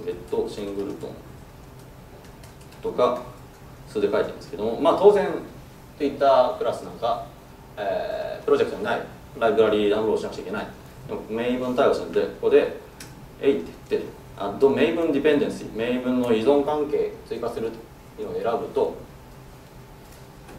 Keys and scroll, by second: 13.1 alt+Return.